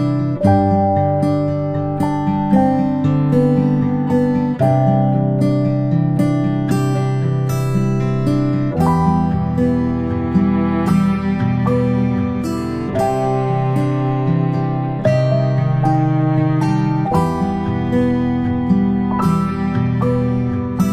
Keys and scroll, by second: 2.7 ctrl+i, 3.8 v, 7.3 ctrl+[, 7.5 ctrl+[, 10.0 ctrl+c, 10.1 ctrl+v, 15.5 ctrl+[, 15.9 ctrl+], 17.1 i, 18.7 v.